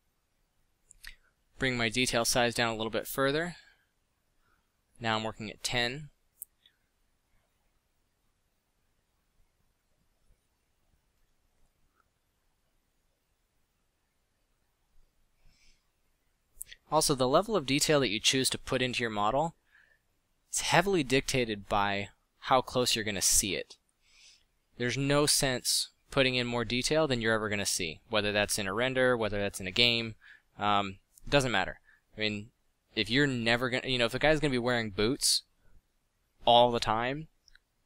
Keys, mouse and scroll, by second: 4.1 f, 5.9 f, 13.4 f, 14.0 f, 15.7 f, 24.2 f, 28.9 f, 35.8 f.